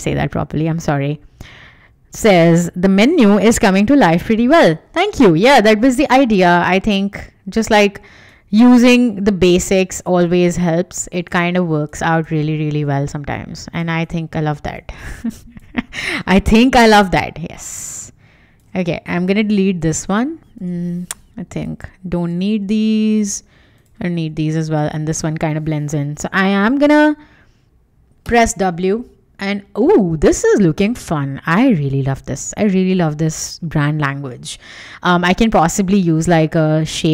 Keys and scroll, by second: 5.3 w, 20.5 BackSpace, 28.2 w.